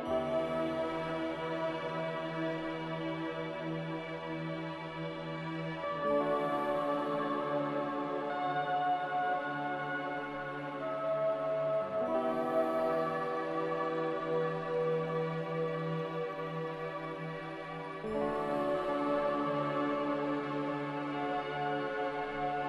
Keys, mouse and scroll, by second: 0.8 typing, 1.4 Return, 2.1 ctrl+c, 2.4 ctrl+v, 3.3 typing, 3.5 Return, 6.2 ctrl+v, 7.4 typing, 8.3 Escape, 9.9 Escape, 10.8 ctrl+c, 10.9 ctrl+v, 13.6 z, 15.8 5, 16.3 Return, 17.8 m.